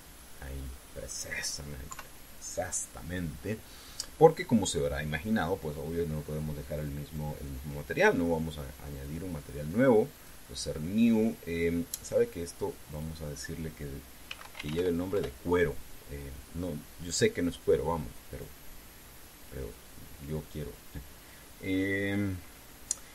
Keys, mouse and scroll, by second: 2.7 KP_3, 7.8 click, 9.8 click, 10.9 click, 12.7 click, 13.7 click, 15.0 c, 15.3 e, 15.4 r, 15.5 o, 15.9 Return, 19.1 click, 20.1 click.